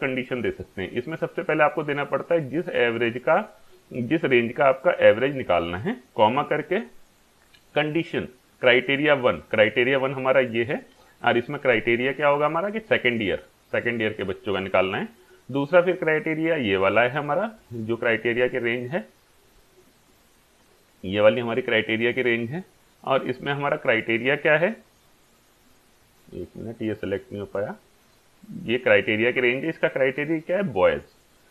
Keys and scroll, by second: 6.4 ,, 11.5 ,, 15.0 ,, 30.1 ,.